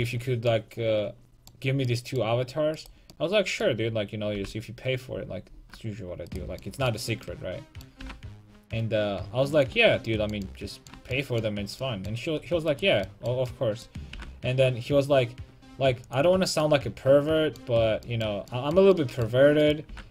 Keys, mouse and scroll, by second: 0.0 a, 2.7-4.3 right drag, 4.3 g, 6.3 right click, 6.8-9.5 right drag, 8.0 g, 10.6-12.7 middle drag, 12.7 click, 12.7 right click, 14.1 g, 16.2-18.5 drag, 19.6 right click, 19.9 g.